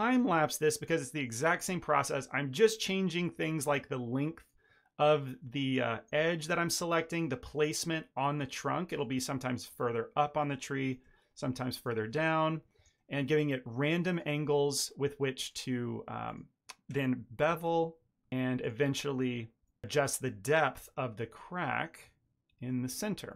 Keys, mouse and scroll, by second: 0.5 shift+middle drag, 1.0 ctrl+drag, 1.5 r, 2.0 g, 2.8 a, 2.9 a, 3.0 middle click, 3.1 ctrl+middle click, 3.5 click, 4.1 ctrl+click, 4.5 click, 5.0 ctrl+b, 6.1 shift+middle click, 6.2 ctrl+middle click, 6.4 1, 6.8 click, 6.9 shift+click, 7.2 m, 7.9 shift+middle click, 8.3 click, 8.5 shift+click, 8.8 m, 9.3 ctrl+middle click, 9.6 2, 10.0 alt+click, 10.3 middle click, 10.8 shift+click, 11.0 middle click, 11.1 shift+middle click, 11.3 ctrl+middle click, 11.6 shift+click, 11.8 shift+middle click, 12.1 alt+s, 13.1 shift+click, 13.2 shift+middle click, 13.4 shift+middle click, 13.8 shift+click, 14.3 r, 15.7 click, 16.0 ctrl+click, 16.4 r, 17.5 click, 18.2 ctrl+click, 18.6 middle click, 19.2 shift+click, 19.4 middle click, 19.9 shift+click, 20.3 alt+s, 21.8 ctrl+middle click, 22.2 ctrl+middle click, 22.5 Tab, 22.6 ctrl+middle click, 22.7 middle click, 23.3 middle click.